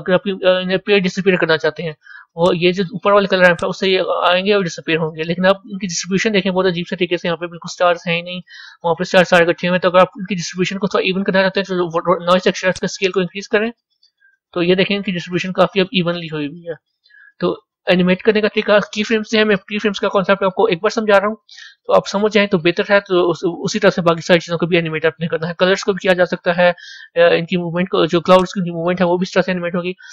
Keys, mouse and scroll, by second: 2.7-6.1 drag, 6.1-12.7 middle drag, 12.7-15.2 drag, 15.2-28.4 middle drag, 28.4-30.1 drag.